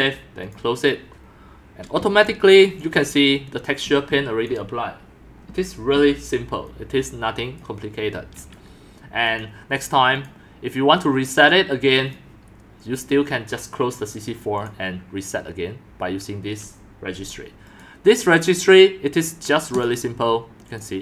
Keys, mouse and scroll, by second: 1.7 click, 2.0-4.1 typing, 4.5-7.6 drag, 8.1 click, 9.4 click, 10.2 click, 12.1 click, 14.4 click, 17.8 right click.